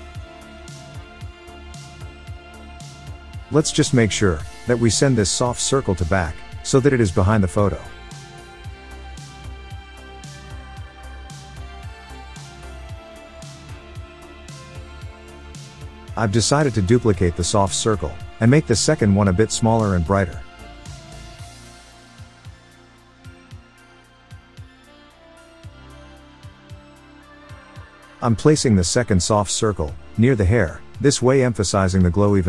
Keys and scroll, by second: 6.8 super+z, 11.2 super+z, 17.4 super+d, 29.5 super+z.